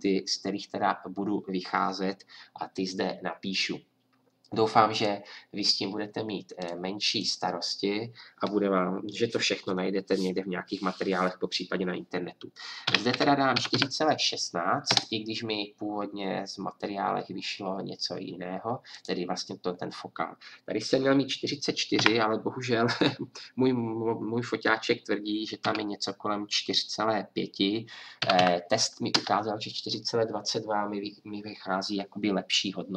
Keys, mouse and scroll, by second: 4.9-18.9 drag, 28.4 KP_0.